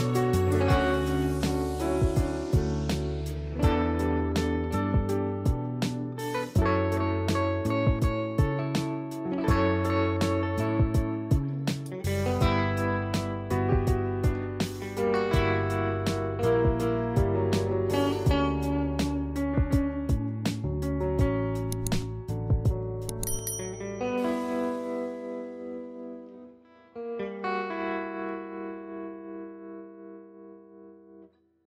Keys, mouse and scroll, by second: 4.1 click, 7.2 click, 13.3 click, 15.9 click, 16.4 ctrl+click, 18.9 click, 22.4 click, 24.8 space, 25.0 click, 25.3 space, 26.8 F12.